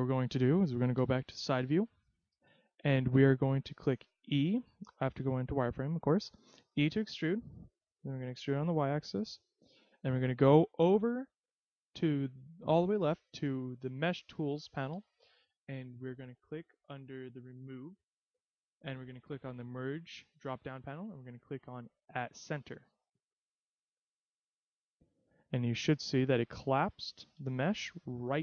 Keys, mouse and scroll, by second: 1.2 KP_3, 2.8-3.5 scroll up 1, 5.2 z, 6.9 e, 9.5 click, 13.8-14.3 scroll up 3, 20.1 click, 24.0-25.5 scroll down 1, 26.0 middle click, 26.6-27.3 scroll up 2, 27.3 z, 27.9-28.4 scroll up 2.